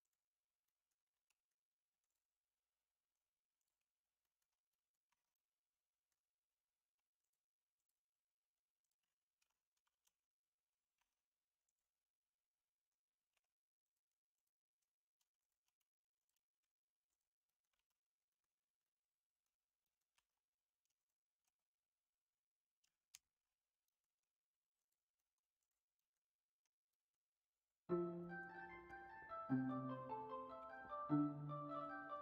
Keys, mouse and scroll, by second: 0.6 middle click, 1.2 middle click, 1.5-4.2 drag, 4.2 middle click, 4.7 middle click, 5.0 Tab, 5.3-6.0 middle drag, 9.4 ctrl+a, 9.9 alt+z, 10.9 Tab, 13.3 3, 16.5 x, 17.4 middle click, 17.7 alt+z, 18.2 middle click, 18.8 middle click, 19.8 middle click, 20.1 Tab, 23.2 ctrl+KP_Subtract, 23.8 middle drag, 25.1 middle drag, 25.9 middle click, 26.9 middle click, 28.2 middle click, 28.8 Tab, 29.4 middle click, 30.6 1.